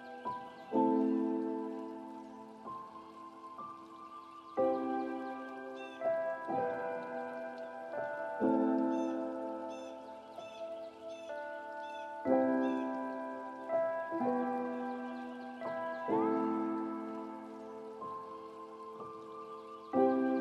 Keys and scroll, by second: 2.6 ctrl+;.